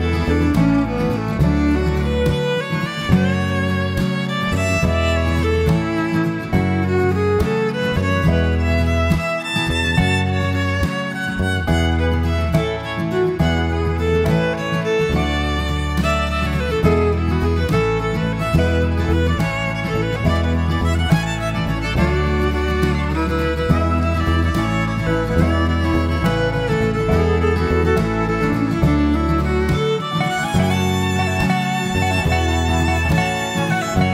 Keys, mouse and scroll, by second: 1.2 click, 2.7 click, 3.6 click, 4.0 click, 5.2 shift+f, 7.4 click, 17.5 click, 18.5 click, 19.8 click, 20.9 click, 22.0 click, 22.9 click, 23.6 click, 24.2 click, 25.6 click, 26.4 click, 27.9 click, 28.4 click, 29.4 click, 29.7 click, 31.8 click, 32.7 click, 33.8 click.